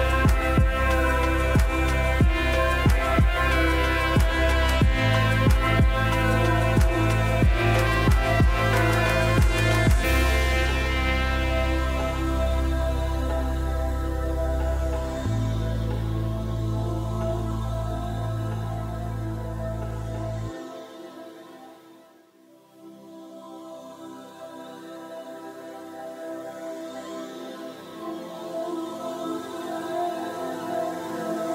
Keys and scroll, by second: 0.0-0.6 typing, 25.4-27.3 typing.